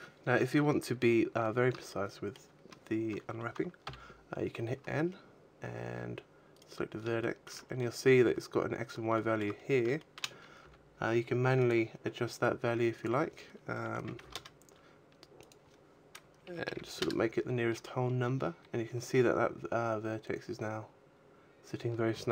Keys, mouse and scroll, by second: 1.0 scroll up 2, 1.8 shift+middle click, 3.7 n, 4.9-5.4 scroll up 4, 6.3 right click, 7.1 shift+middle click, 7.6 scroll down 1, 9.0 shift+middle click, 9.4-9.7 scroll up 2, 9.7 shift+middle click, 10.3 g, 11.7 click, 12.8 click, 15.3 click, 18.0-19.3 scroll up 8, 19.3-19.8 scroll up 1, 22.1-22.3 scroll down 9.